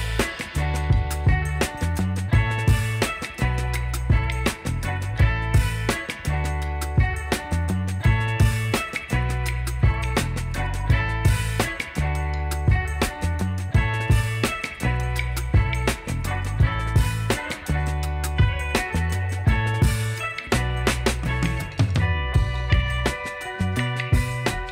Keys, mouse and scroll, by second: 0.5 shift+click, 2.6 typing, 2.8 Return, 4.2 shift+click, 4.9 alt+middle click, 5.2 alt+scroll up 1, 7.4-7.7 alt+scroll down 1, 7.8-8.9 alt+scroll up 12, 8.9 middle click, 10.0 middle click, 10.2-10.6 alt+scroll up 1, 10.6 alt+scroll down 1, 10.7 alt+middle click, 14.2-14.6 alt+scroll down 1, 15.1 alt+middle click, 15.4-15.9 alt+scroll up 1, 16.3 alt+middle click, 17.0 alt+scroll up 1, 17.2 alt+scroll down 1, 17.3 alt+middle click, 17.5 alt+scroll up 1, 18.5-18.8 alt+scroll up 1, 18.8 alt+scroll down 1, 18.9 alt+middle click, 19.6 alt+middle click, 22.7 ctrl+z, 23.2 alt+scroll down 1, 24.6 shift+click.